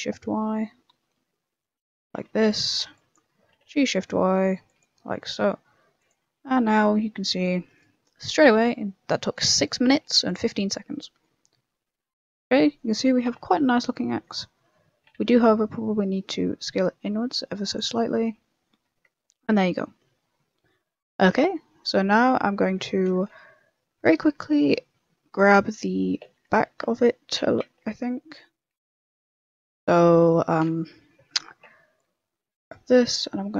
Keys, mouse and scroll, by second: 2.0 a, 2.2 ctrl+r, 2.7 a, 2.8 b, 3.4 g, 4.9 a, 5.9 click, 6.2 Tab, 6.4 middle click, 7.1 scroll down 2, 7.3 middle click, 7.6 right click, 8.4 g, 9.7 g, 10.5 scroll down 1, 10.6 middle click, 11.1 scroll down 1, 12.6 scroll down 1, 12.7 middle click, 13.2 s, 14.0 middle click, 14.3 shift+middle click, 14.7 middle click, 15.0 s, 17.8 middle click, 19.1 shift+middle click, 19.3 scroll up 1, 19.4 middle click, 19.8 middle click, 20.2 shift+middle click, 20.8 middle click, 21.7 middle click, 22.1 middle click, 22.4 scroll up 2, 22.5 shift+middle click, 22.8 middle click, 23.4 KP_0, 24.0 KP_0, 24.8 KP_3, 25.3 click, 25.5 middle click, 25.9 scroll up 2, 26.1 middle click, 26.2 Tab, 26.4 middle click, 26.7 scroll up 1, 26.9 middle click, 27.8 shift+middle click, 28.2 middle click, 28.5 scroll up 2, 29.0 middle click, 29.3 shift+middle click, 29.7 middle click, 30.9 KP_3, 31.2 KP_1, 31.9 b.